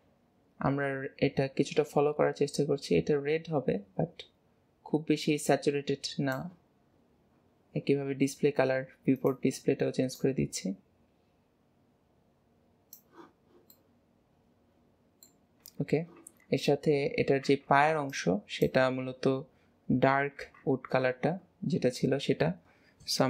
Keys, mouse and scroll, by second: 6.9-7.3 scroll down 2, 7.5-9.2 scroll down 19, 9.2 click, 13.5-13.8 scroll down 2, 13.8-15.3 middle drag, 15.3-15.7 scroll up 1, 15.7 Tab, 16.3 Tab, 16.7-17.1 scroll up 2, 17.3-17.6 scroll up 1, 21.4 scroll up 2, 22.3 scroll up 9, 22.7 scroll down 1, 22.8-23.2 scroll up 2.